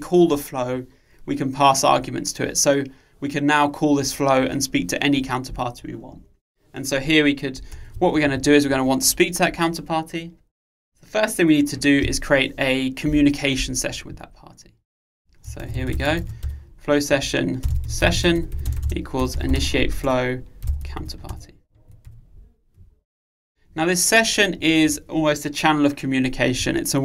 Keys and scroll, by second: 17.3 Return.